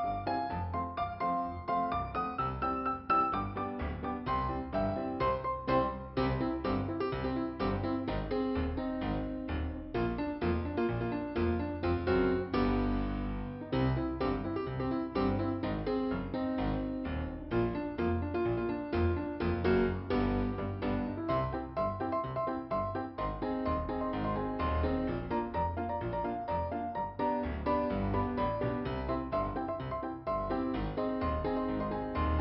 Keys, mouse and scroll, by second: 0.6 click, 0.8 click, 0.8 double click, 0.9 double click, 1.1 double click, 1.2 double click, 1.4 double click, 1.8 double click, 1.8 double click, 2.1 double click, 4.0 click, 9.8 right click, 10.5 scroll down 2, 11.1 click, 14.8 click, 15.8 click, 17.9 click, 18.9 scroll up 2, 21.0 click, 21.4 click, 22.3 click, 23.2 click, 25.2 click, 26.7 click, 28.2 click.